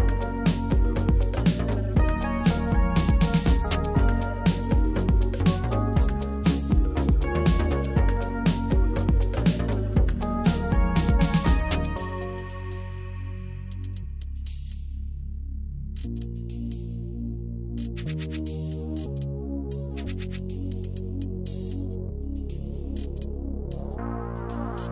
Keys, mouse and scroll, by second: 0.3 click, 1.0 KP_1, 2.0 g, 2.3 z, 2.9 click, 3.8 s, 4.8 click, 6.1 click, 6.6 s, 6.9 z, 7.6 click, 8.2 g, 8.5 z, 9.3 click, 9.8-10.5 middle drag, 11.8 click, 12.7 z, 13.5 drag, 13.7 middle drag, 16.0 click, 16.4 click, 16.6-17.2 middle drag, 17.4 click, 18.0 shift+d, 18.4 Escape, 19.0 r, 19.1 s, 19.8 Escape, 20.1 r, 20.4 z, 22.4 click, 22.7 click, 23.1-23.6 middle drag, 24.3 click, 24.7 shift+click.